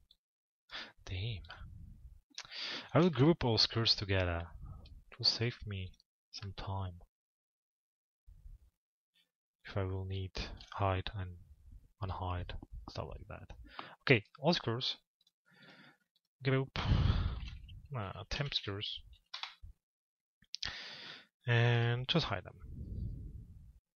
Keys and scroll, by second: 1.9 p, 18.9 Return.